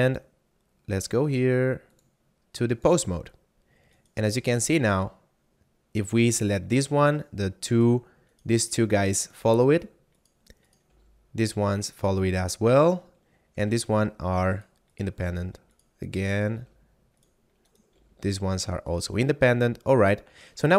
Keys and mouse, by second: 1.8 click, 3.9 right click, 4.6 g, 7.7 right click, 9.5 g, 10.2 right click, 11.0 g, 11.8 right click, 13.7 g, 14.6 right click, 15.2 g, 15.7 right click, 16.5 g, 17.1 right click, 17.9 g, 18.9 right click, 19.1 a, 20.0 middle click.